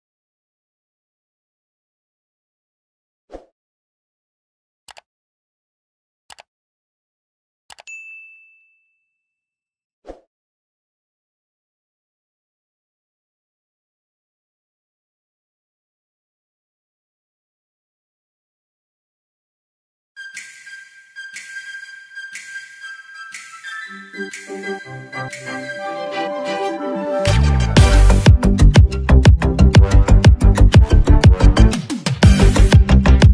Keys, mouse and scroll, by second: 1.2 Down, 5.8 click, 11.7 click, 14.3 click, 17.2-23.3 drag, 25.2 alt+scroll up 1, 25.9 space, 26.1 click, 26.4 space, 28.6 click.